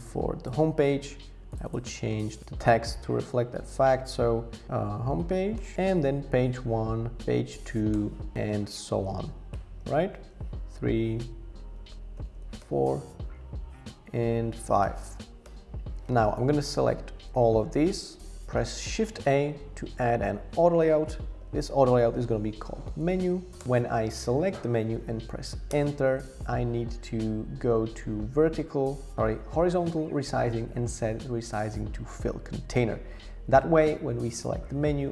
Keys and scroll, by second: 2.4 shift+h, 4.4-6.2 typing, 7.2 Right, 7.4 typing, 7.9 Return, 9.2 Right, 9.5-9.8 typing, 10.2 Return, 12.2-12.6 typing, 12.6 Return, 14.8 BackSpace, 15.0 5, 15.5 Return, 18.9 shift+a, 21.3 super+r, 22.4-23.6 typing, 23.6 Return, 25.7 Return, 33.6 shift+Return.